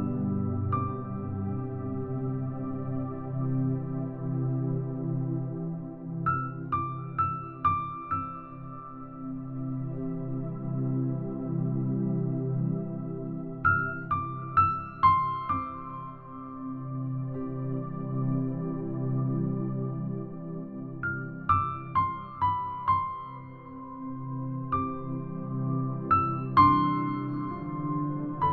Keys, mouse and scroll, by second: 1.1 e, 3.3-3.7 scroll down 2, 4.2 middle click, 4.5 scroll up 2, 4.7 middle click, 4.7-5.5 scroll down 1, 5.3 s, 7.1 click, 7.7 e, 8.1 click, 8.3 s, 10.6 middle click, 10.6-11.3 scroll down 2, 11.3 click, 12.8 click, 12.8 middle click, 14.7 middle click, 14.7-15.6 scroll down 2, 15.6 e, 16.7 click, 17.1 middle click, 17.8 e, 19.4 click, 19.6 e, 21.0 middle click, 22.6 click, 23.0 e, 23.7 click, 24.1 middle click, 24.8 e, 27.0 click, 27.3 e, 27.9 click, 28.3 middle click.